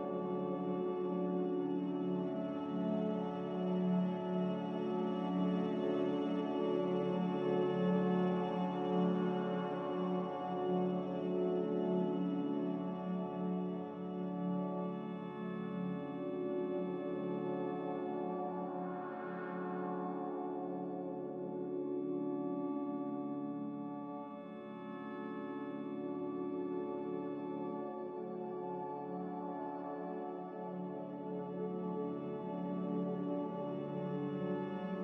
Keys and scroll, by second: 0.0 Return, 3.5 b, 7.0-7.8 typing, 12.6 Escape, 22.9 a, 31.3 b.